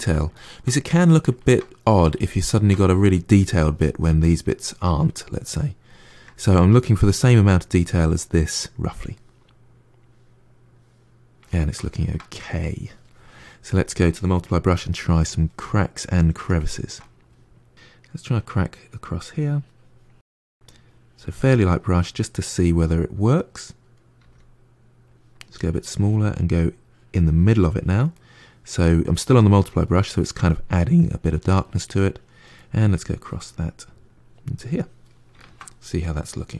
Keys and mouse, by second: 0.2-13.5 ctrl+middle drag, 13.5-14.5 drag, 14.5 f, 15.6-18.7 middle drag, 18.7-21.9 drag, 21.9-24.1 middle drag, 24.1 f, 25.5-28.0 drag, 28.0-30.5 middle drag, 30.5-32.5 drag, 32.5 middle click, 33.0-35.3 drag, 35.3-36.5 ctrl+middle drag.